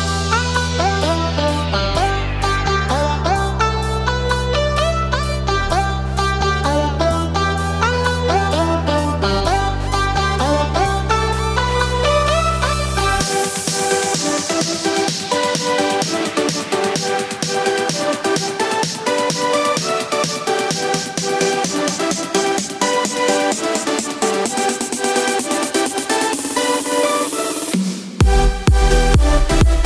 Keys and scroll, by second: 2.6 ctrl+z.